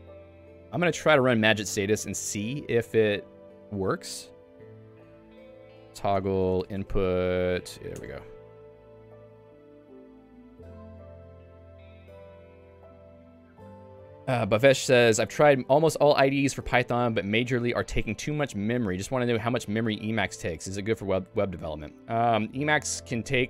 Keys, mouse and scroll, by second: 7.9 Return.